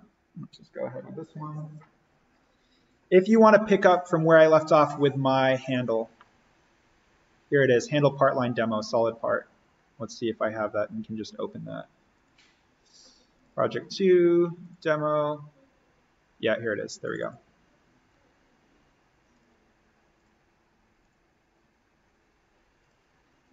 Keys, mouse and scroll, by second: 2.9 click, 7.3 click, 10.4 click, 21.6 click.